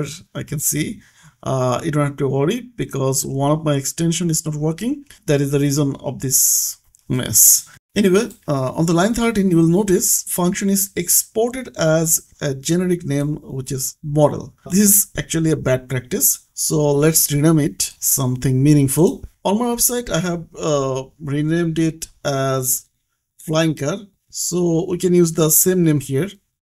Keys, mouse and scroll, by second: 1.9 click, 2.7 click, 8.2 click, 12.4 click, 14.5 click, 15.4 scroll down 1, 17.0 click, 21.9 click, 24.6-25.8 typing.